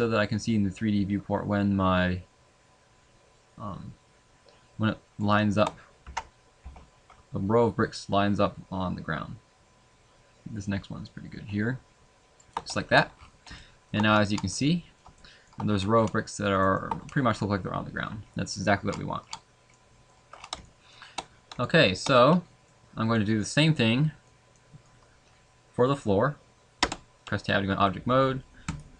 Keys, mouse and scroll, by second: 13.2 scroll down 4, 13.5 shift+middle click, 14.2-15.4 scroll down 11, 14.6 middle click, 15.2 middle click, 15.8 scroll up 3, 16.7 shift+middle click, 16.7 scroll up 2, 18.8 scroll down 1, 18.9 scroll down 5, 19.2-19.8 scroll down 3, 19.7 middle click, 20.3-20.7 scroll down 2, 20.6 shift+middle click, 21.3-21.6 scroll down 3, 21.6 shift+middle click, 22.1 middle click, 24.1 middle click, 24.5 middle click.